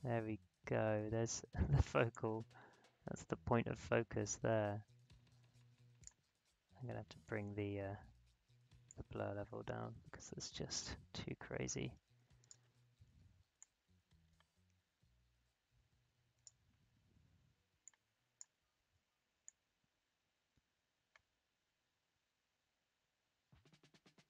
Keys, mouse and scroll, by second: 2.1-8.8 drag, 8.8-24.2 drag.